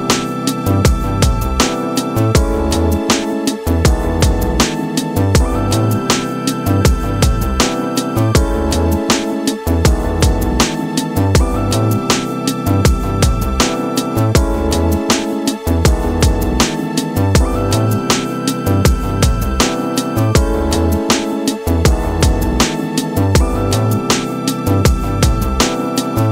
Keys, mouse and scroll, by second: 0.2 g, 5.1-7.2 shift+middle drag, 7.2 click, 8.3-12.7 drag.